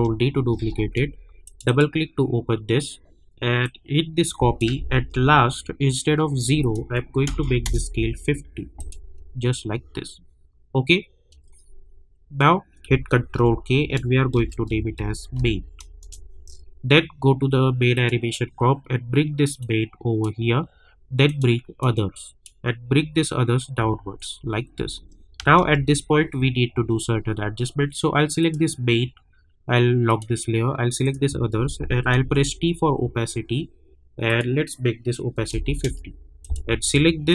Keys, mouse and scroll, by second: 1.4-5.1 drag, 5.1 k, 6.6 click, 7.6 Return, 8.8 click, 9.4-9.8 alt+scroll up 1, 12.8 ctrl+Num_Lock, 12.8-13.2 alt+scroll up 1, 13.3 ctrl+k, 14.1-15.3 typing, 16.0 Return, 17.9-23.8 drag, 23.8 space, 28.4 click, 32.2 t, 34.2 click, 35.8 Return, 36.4 click.